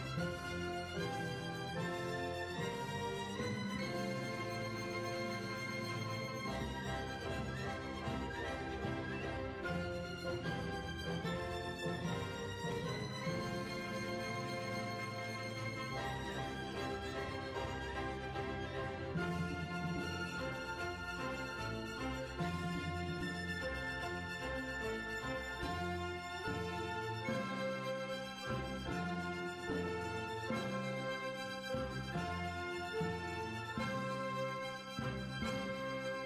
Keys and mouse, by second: 0.4-1.7 drag, 0.7 right click, 3.8 Tab, 5.2-7.9 middle drag, 7.9 click, 8.7 middle click, 9.6 middle click, 9.6 KP_3, 10.1 Tab, 11.1 right click, 11.6-15.2 typing, 12.0 right click, 15.2 right click, 16.5-17.8 right drag, 16.8-18.4 drag, 18.6 click, 19.4-21.2 middle drag, 21.4 click, 21.4 right click, 22.4 KP_1, 22.9-24.5 middle drag, 32.4 ctrl+r, 33.9 middle click, 34.2 right click, 34.5 middle click, 35.1-36.2 drag.